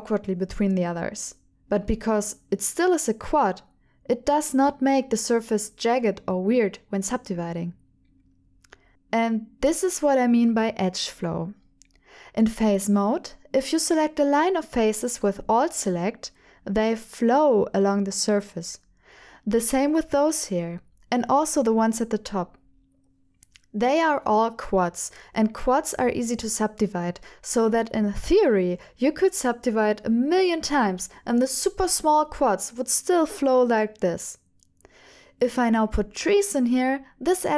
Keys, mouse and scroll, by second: 2.2 f, 2.6-3.9 middle drag, 5.2 middle click, 6.1 shift+middle click, 6.5 middle click, 12.0 3, 13.2 alt+click, 20.0 alt+click, 20.8 alt+click, 26.5 shift+middle click, 27.8 click, 30.4 x, 33.4 ctrl+z, 34.1 x, 35.8 1, 36.3 click, 36.8 shift+click, 37.1 shift+click.